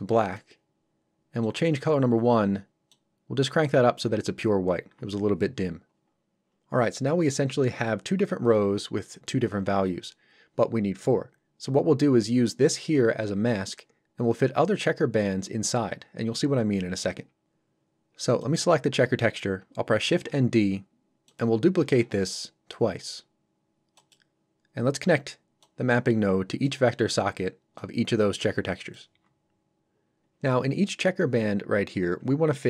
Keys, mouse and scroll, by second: 2.9 click, 18.4 click, 20.1 shift+d, 21.3 click, 21.8 shift+d, 23.9 click.